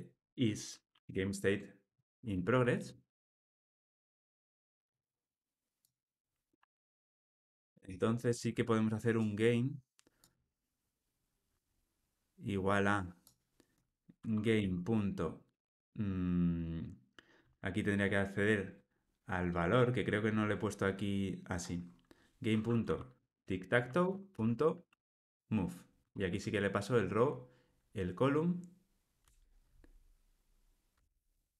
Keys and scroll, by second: 6.7 super+x, 11.8 super+v, 24.0 Return, 31.0 Tab.